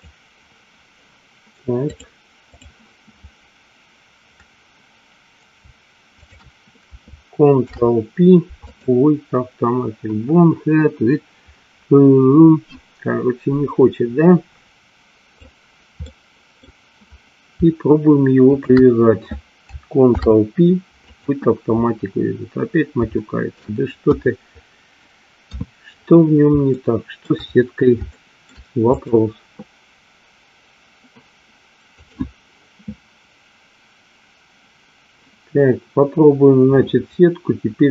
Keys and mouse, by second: 2.0 click, 6.3 shift+click, 7.6 ctrl+p, 14.7 click, 16.1 middle click, 18.6 shift+click, 20.1 ctrl+p, 23.3 shift+middle click, 24.3 KP_1, 25.5 KP_3, 26.9 shift+middle click, 28.3 shift+middle click, 29.1 click, 32.1-37.9 drag.